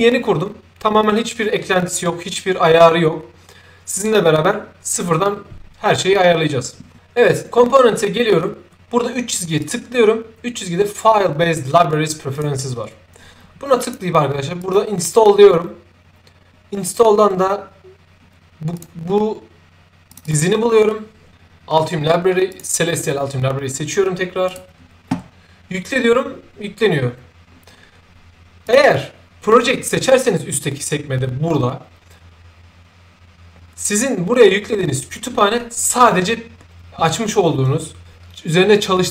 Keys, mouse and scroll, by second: 7.2 click, 9.5 click, 12.3 click, 13.8 click, 14.6 click, 18.7 click, 20.0 click, 20.2 click, 22.4 click, 24.4 click, 28.6 click.